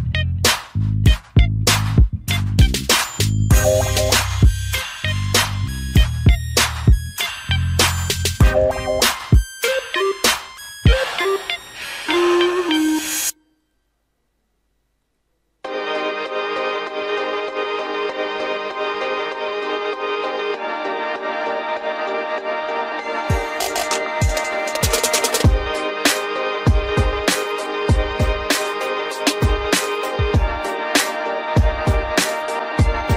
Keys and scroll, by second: 8.3 ctrl+d, 11.6 ctrl+0.